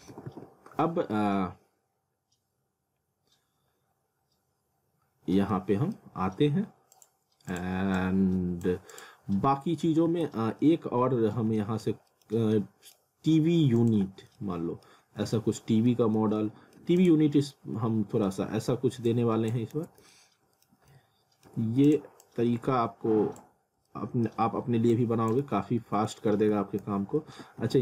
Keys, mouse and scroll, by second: 0.1 alt+w, 0.9-1.3 scroll down 1, 3.0 scroll up 1, 4.9 scroll down 1, 5.5 middle click, 6.9 click, 9.8 alt+w, 10.6 alt+middle click, 12.2 scroll down 1, 12.5 middle click, 13.8 click, 14.1 z, 14.4 alt+middle click, 15.1 scroll down 1, 15.4 alt+middle click, 16.4 alt+middle click, 17.0 click, 17.8 alt+middle click, 19.1 click, 19.7 z, 20.1 middle click, 20.7 scroll down 1, 20.9 middle click, 21.8 click, 23.9 alt+middle click, 24.9 click, 25.9 z, 26.3 alt+w, 26.8 z, 27.3 w.